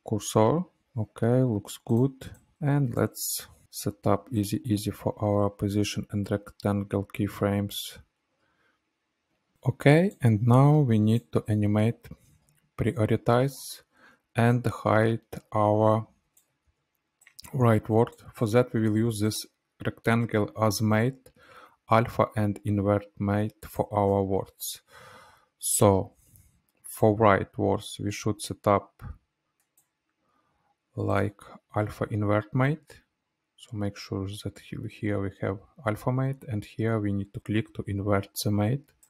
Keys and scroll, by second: 0.8 Right, 3.6 F9, 7.1 space, 16.9 ctrl+z, 21.0 ctrl+c, 24.3 ctrl+v.